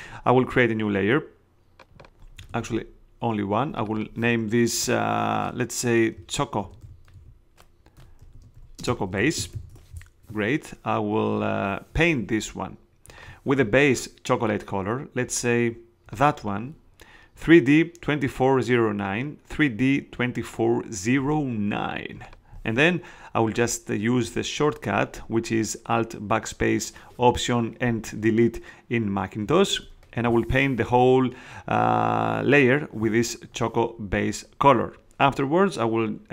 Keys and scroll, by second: 2.6 super+z, 6.3-10.0 typing, 29.7 alt+BackSpace.